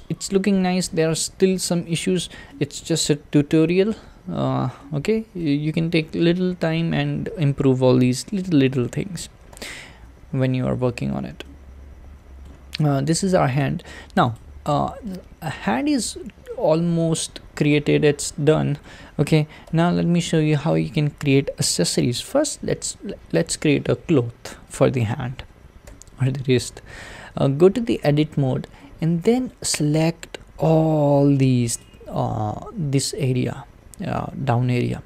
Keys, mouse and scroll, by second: 2.1-2.5 scroll down 2, 2.5-4.2 middle drag, 4.2-4.8 scroll up 2, 4.8-9.6 middle drag, 9.6 `, 10.3-11.5 scroll down 2, 11.5-13.6 shift+middle drag, 13.6 click, 14.3 click, 15.0-18.1 middle drag, 24.8 click, 25.9 Tab, 28.9-31.8 shift+middle drag, 31.8 click, 34.8-35.0 shift+middle drag.